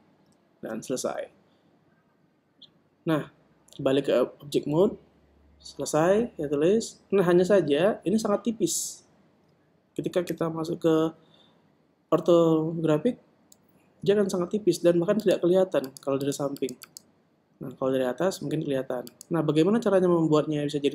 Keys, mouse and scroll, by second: 1.3 Tab, 9.0 KP_1, 11.3 KP_5, 15.1 a, 16.3-19.8 middle drag, 19.8-20.9 right drag.